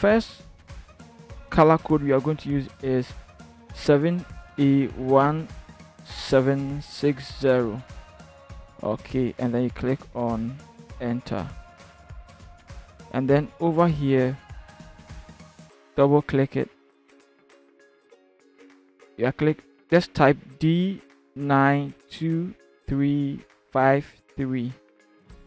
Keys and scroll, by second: 3.8 7, 4.5 a, 4.9 1, 5.8 7, 7.0 6, 7.4 0, 20.4-24.1 typing.